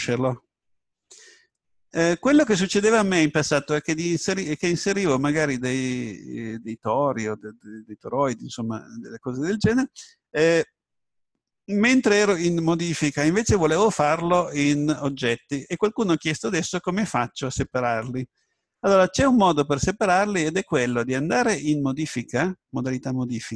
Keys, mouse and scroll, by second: 1.4 middle click, 2.5-3.3 scroll up 1, 3.3-4.5 scroll down 1, 18.8 Tab.